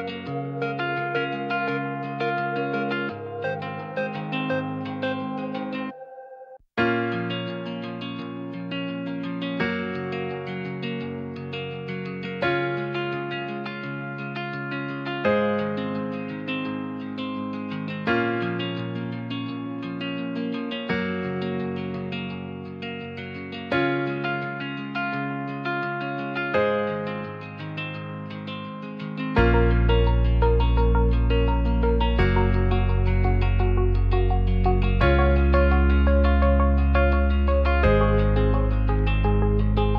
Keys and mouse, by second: 0.7-1.3 drag, 2.0 r, 3.6 click, 4.4 click, 5.5 r, 9.0 click, 10.1-10.7 drag, 20.4 x, 23.0 Tab, 25.1 i, 27.7 e, 29.1 click, 30.2 i, 31.8 e, 33.0 click, 33.2 Tab, 33.7 click, 37.9 click, 39.3 shift+g, 39.4 z.